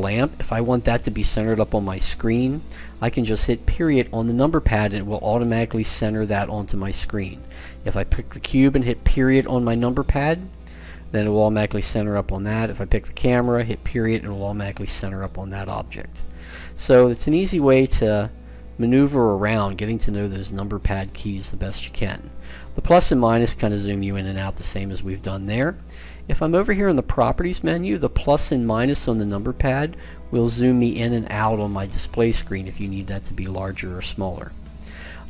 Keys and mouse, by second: 4.1 KP_Decimal, 5.5-7.4 middle drag, 7.4-8.9 right drag, 8.9 middle click, 9.0 click, 9.5 KP_Decimal, 11.4-12.8 middle drag, 12.8-13.8 drag, 13.8 KP_Decimal, 15.4-17.6 middle drag, 17.6-18.6 drag, 18.6 KP_Decimal, 20.5-22.6 middle drag, 23.3 KP_Subtract, 23.8 KP_Add, 24.0 KP_Add, 29.3 KP_Subtract, 30.2 KP_Add, 30.5 KP_Add.